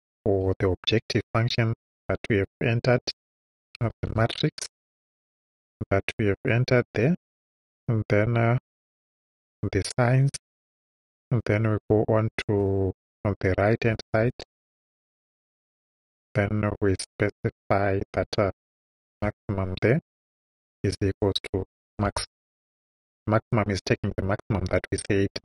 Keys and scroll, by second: 0.4 j, 1.9 ,, 3.6-5.3 typing, 7.3 ,, 8.6-9.7 typing, 10.9 ,, 13.7-15.1 typing, 16.3 ,, 18.8-22.9 typing.